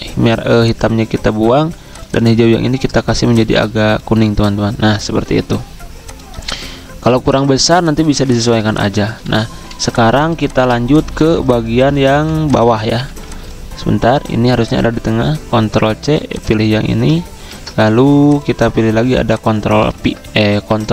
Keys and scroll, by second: 7.1 z, 9.1-10.1 typing, 11.2 v, 12.8-14.4 typing, 15.5 ctrl+x, 17.3 ctrl+alt+2, 19.7 ctrl+f.